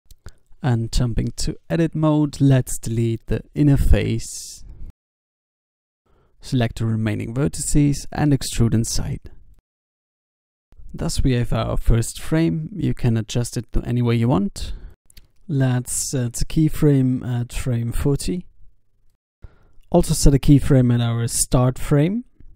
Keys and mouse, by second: 0.0 ctrl+Tab, 0.9 ctrl+z, 0.9 x, 1.0 x, 5.0 ctrl+Tab, 7.0 a, 7.6 e, 7.9 s, 10.9 Tab, 14.0 click, 14.1 Tab, 14.5 s, 15.3 Tab, 20.0 i.